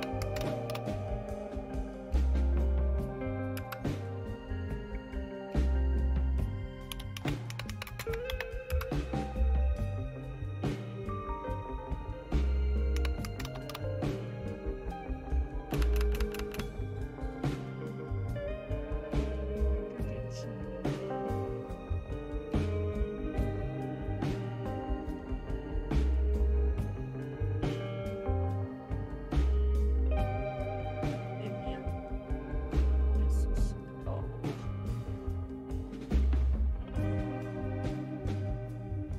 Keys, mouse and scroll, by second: 0.0-1.2 typing, 3.5 Return, 6.7-8.8 typing, 12.7-14.2 typing, 15.7-16.5 typing, 21.4-23.4 scroll down 1, 23.4-24.2 scroll down 1, 24.2-25.6 scroll down 1, 25.6-26.1 scroll down 1, 26.1-27.4 scroll down 1, 27.4-28.9 scroll down 1, 28.9-29.7 scroll down 1, 29.7-30.7 scroll down 1, 30.7-31.7 scroll down 1, 31.7-32.5 scroll down 1, 32.5-34.6 scroll down 1, 36.5-39.1 drag.